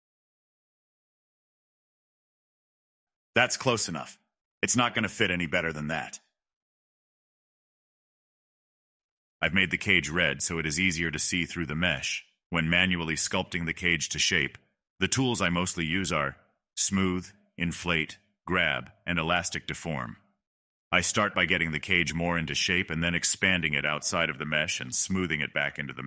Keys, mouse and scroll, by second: 4.7-5.1 scroll down 2, 7.1-8.1 drag, 8.2 middle drag, 8.7-9.3 drag, 9.3 middle click, 9.7 click, 9.8 scroll up 2, 10.0-10.5 scroll down 1, 10.5 click, 10.6 scroll down 1, 10.8-16.1 drag, 16.1 ctrl+z, 16.3-17.7 drag, 18.1 scroll up 1, 18.3 shift+middle click, 18.4 shift+scroll down 1, 18.9-20.5 drag, 20.5 scroll down 1, 20.6 middle click, 21.6 middle click, 21.9 click, 22.1 middle click, 22.5 click, 22.9 middle click, 23.1 scroll down 1, 23.2 middle click, 23.5 click, 23.7 middle click, 24.4 click, 24.5 scroll up 1, 24.7-25.8 drag, 25.8 scroll down 1, 25.8 middle click.